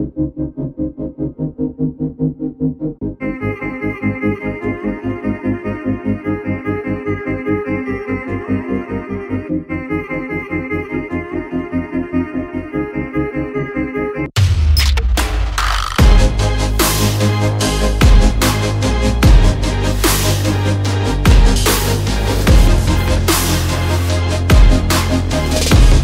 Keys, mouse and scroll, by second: 0.0 double click, 0.2 click, 0.5 double click, 0.7 click, 0.9 double click, 1.6-1.9 alt+scroll down 1, 1.9 alt+scroll up 1, 2.0 alt+scroll down 1, 2.3-2.7 alt+scroll up 1, 2.9 click, 4.0 double click, 4.3 click, 4.8 double click, 5.1 alt+scroll down 1, 5.5 click, 5.8 alt+scroll up 1, 6.1 click, 18.7 click, 18.7 alt+scroll up 1, 19.2 click, 19.4 double click, 20.2 ctrl+z, 20.6 click, 20.8 double click, 21.4 click, 22.1 alt+click, 22.3-22.6 alt+scroll up 1, 22.6-23.1 alt+scroll down 1, 23.2 alt+scroll up 1, 23.5 click, 23.9 alt+scroll up 1, 24.4 alt+click, 25.3 alt+click.